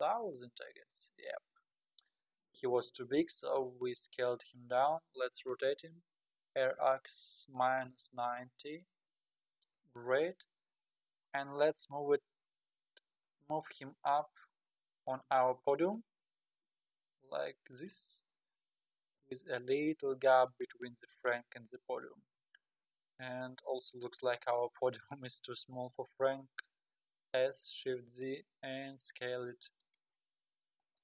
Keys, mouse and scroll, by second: 4.5 scroll down 2, 6.5 r, 9.7 KP_1, 10.4-11.3 scroll down 5, 11.3 scroll down 2, 14.0 g, 18.1-19.1 scroll down 18, 19.1 g, 21.6-22.5 scroll up 18, 23.0 scroll up 1, 23.3-24.2 middle drag, 24.2-24.6 drag, 24.6-25.0 scroll up 5, 26.4-27.1 scroll down 4, 27.3 s, 30.3 scroll up 4, 30.6-31.0 middle drag.